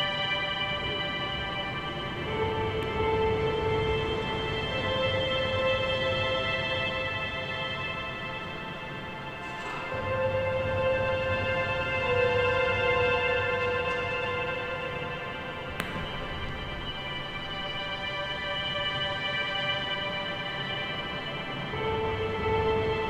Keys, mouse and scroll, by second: 0.2 click, 0.4-0.9 scroll up 1, 0.9 g, 2.6 a, 2.8 a, 3.4 click, 4.0 click, 4.2 click, 5.2 r, 6.0 g, 7.3-8.1 scroll down 2, 8.1 a, 8.3 a, 8.9 Tab, 9.6-11.2 shift+middle drag, 11.2 scroll down 1, 12.4 KP_7, 12.7 a, 13.0 a, 16.6-17.4 scroll down 1, 17.4-18.7 scroll down 1, 18.7 Tab, 19.7 click, 20.4 g, 21.7 a, 21.9 a, 22.1 click, 22.3 g.